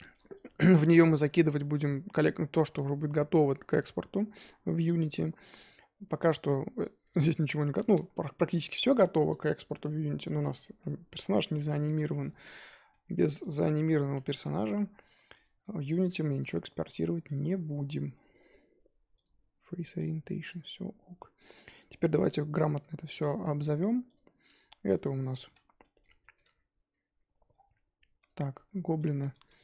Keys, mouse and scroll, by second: 0.3-0.7 drag, 0.7-2.7 middle drag, 2.7-4.2 scroll down 3, 4.3-5.2 middle drag, 5.2-6.7 scroll up 2, 6.7-7.1 scroll down 1, 7.1-9.6 middle drag, 9.6-10.1 scroll up 5, 10.1 shift+middle drag, 10.4-10.8 scroll up 1, 10.8-11.1 scroll down 3, 11.1-11.7 scroll up 3, 11.7 click, 12.0 shift+middle drag, 12.3 scroll up 2, 12.4 Tab, 12.7-13.2 middle drag, 13.2 Tab, 13.4 click, 13.7 Tab, 14.1 a, 14.3 s, 15.5 Tab, 16.2 shift+click, 16.9 ctrl+j, 17.3 click, 17.4-18.3 scroll down 11, 18.3-19.9 scroll up 3, 19.9-20.8 drag, 20.8 scroll up 3, 21.1-23.7 middle drag, 23.7 click, 24.9 click, 25.3-28.2 shift+middle drag, 28.2 click, 28.5-29.0 scroll up 2, 29.0 click, 29.4 g.